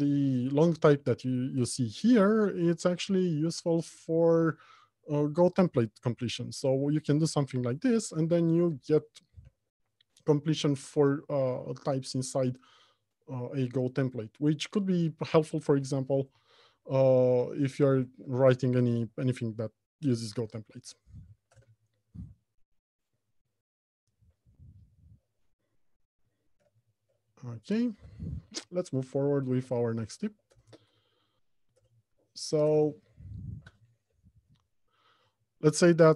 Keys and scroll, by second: 8.4 ctrl+space, 16.4 Return, 20.6 ctrl+space, 21.7 Return, 29.8 alt+Home, 30.3 Left, 30.7 Return.